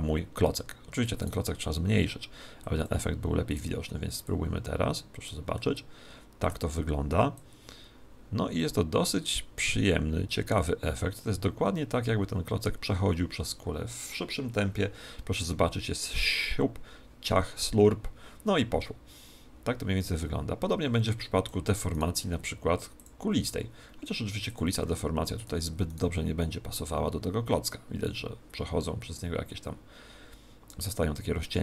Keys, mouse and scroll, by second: 1.1 right click, 1.6 s, 2.7-6.0 drag, 3.4 right click, 5.5-7.3 middle drag, 7.3 click, 21.9 right click, 22.9 click, 25.8 right click, 26.7 click.